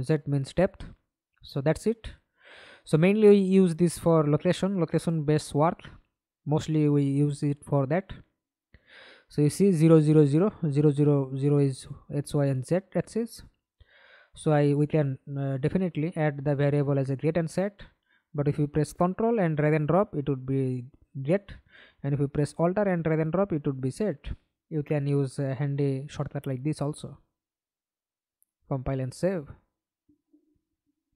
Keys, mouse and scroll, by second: 7.4 right click, 11.7 double click, 14.4 right click, 18.7 alt+click, 20.6-21.6 scroll up 1, 22.2 Delete, 23.6 Delete, 24.1-24.7 scroll down 3, 24.7 right click, 25.1 scroll up 1, 25.3 scroll down 1, 25.4-26.3 scroll up 2, 29.4-29.8 scroll down 3.